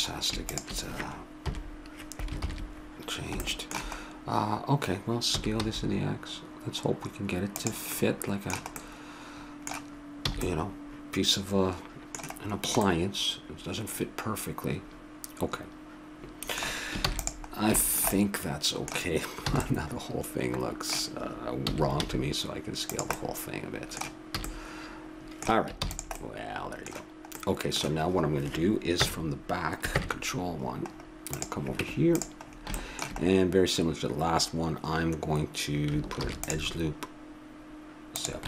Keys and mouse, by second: 1.4 KP_7, 2.4 ctrl+KP_7, 5.3 s, 8.0-9.0 middle drag, 10.3 a, 10.9 middle click, 11.3 middle click, 11.6 middle click, 11.8 middle click, 13.6 middle click, 13.8 middle click, 17.0 ctrl+s, 19.5 a, 21.7 s, 23.2-24.4 middle drag, 24.4 a, 25.8 ctrl+s, 28.9 KP_1, 29.9 ctrl+KP_1, 31.3-32.6 drag, 31.8 Tab, 32.6 middle click, 36.2 ctrl+r.